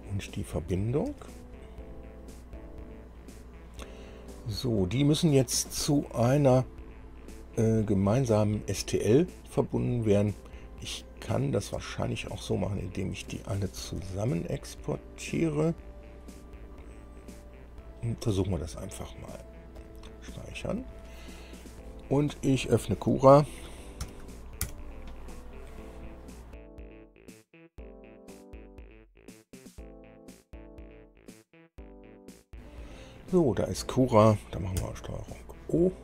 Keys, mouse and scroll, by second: 0.2 click, 1.2 ctrl+e, 2.7 click, 11.5 click, 12.2 shift+click, 14.1 ctrl+e, 19.9 click, 24.1 ctrl+alt+b, 24.8 alt+7, 34.9 ctrl+o.